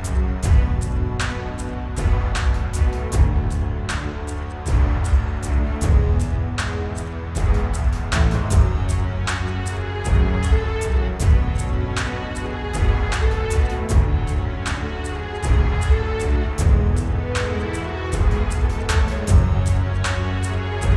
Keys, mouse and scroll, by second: 2.8 ctrl+x, 5.2 ctrl+b.